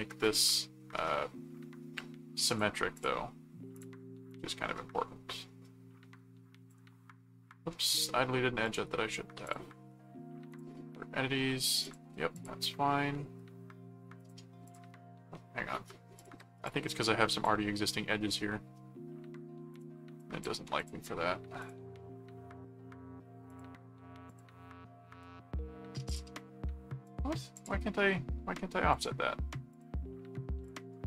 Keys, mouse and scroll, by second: 2.5 click, 3.7-6.7 drag, 7.7 ctrl+z, 8.6 click, 9.4 click, 10.5 click, 11.8 click, 14.2 click, 16.2 click, 19.7-20.7 drag, 21.0 click, 21.6 click, 23.5 click, 24.3 click, 25.1 right click, 26.0 click, 27.0 click, 28.1 middle click, 28.9 click, 29.7 click, 30.6 click.